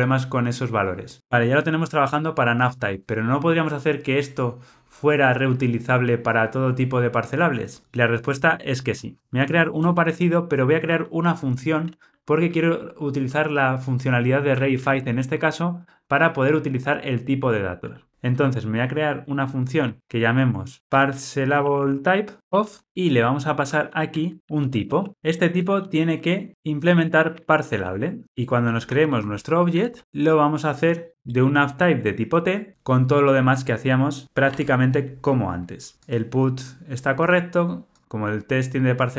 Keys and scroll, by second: 28.2 alt+super+l, 30.0 Return, 34.5 Tab.